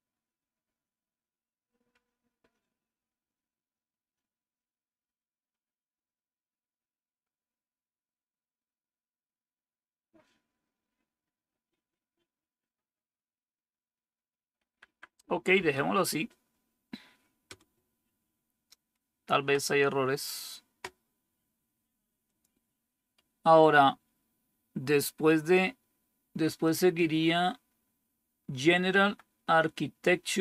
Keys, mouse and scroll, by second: 0.3 Up, 1.8 Up, 3.1 Up, 3.9 Up, 4.3 Up, 5.0 Up, 5.8 Up, 13.5 Up, 13.8 Up, 14.0-14.4 Up, 14.6 Up, 14.8 Up, 15.0 Up, 15.4 Right, 17.4 Return, 26.2 Down, 28.9 Down.